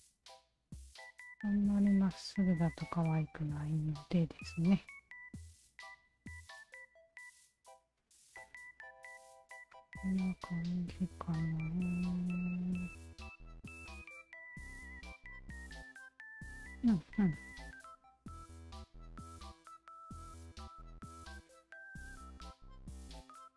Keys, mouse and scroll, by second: 0.4 shift+click, 1.6-2.9 shift+drag, 3.4 Tab, 3.4 alt+click, 4.2 alt+click, 4.7 alt+click, 5.0 Tab, 5.6 alt+click, 6.2 alt+click, 7.1 alt+click, 7.6 alt+click, 8.4 alt+click, 9.2 alt+click, 10.7 alt+click, 11.2 alt+click, 12.3-13.4 alt+drag, 13.5 Tab, 13.9 click, 14.2 alt+right drag, 14.6 alt+right click, 15.7 alt+click, 16.1 alt+right drag, 16.8 alt+click, 17.0 Tab, 17.4 alt+right click, 18.4 click, 19.6-20.6 shift+drag, 21.5 click, 22.4 shift+click.